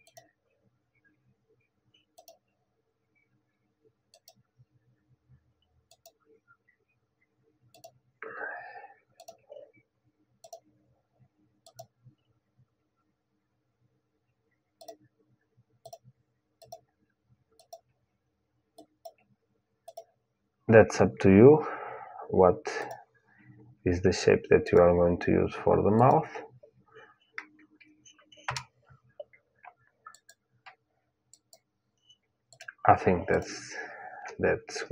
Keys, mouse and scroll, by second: 29.9-34.9 drag.